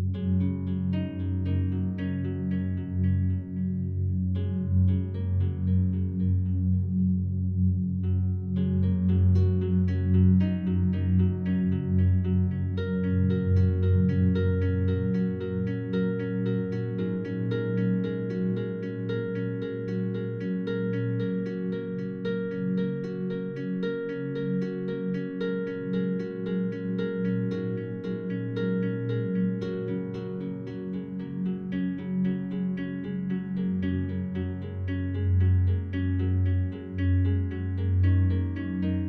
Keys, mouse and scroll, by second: 0.0 click, 3.9 r, 6.9 Return, 7.9 s, 12.4-17.9 drag, 17.9 s, 20.1 click, 23.0 a, 23.2 a, 24.1 alt+click, 25.0 scroll up 1, 25.9 right click, 27.1 Tab, 27.5 right click, 28.7 3, 32.7-38.3 drag, 38.3 a, 38.7 a, 39.0 a.